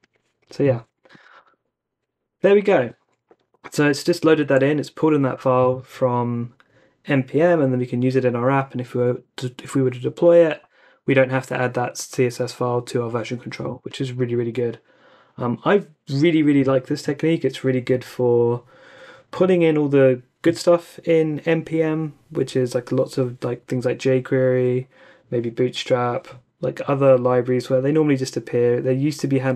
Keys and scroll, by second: 1.4 super+r.